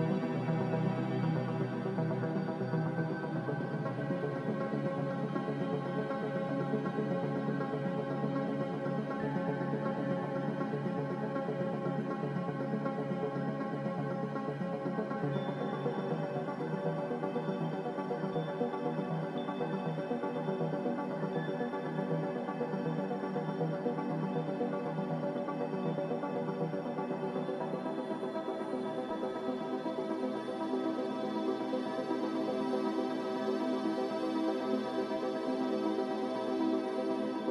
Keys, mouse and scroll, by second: 8.2 click, 9.1 c, 15.1 click, 19.1 b, 30.4 a.